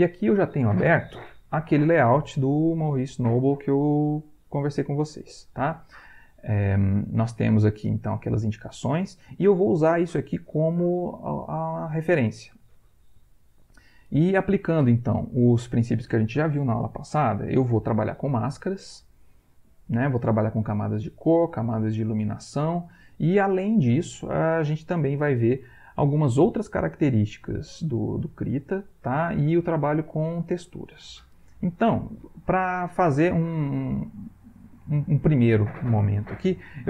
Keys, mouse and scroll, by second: 7.9 middle click.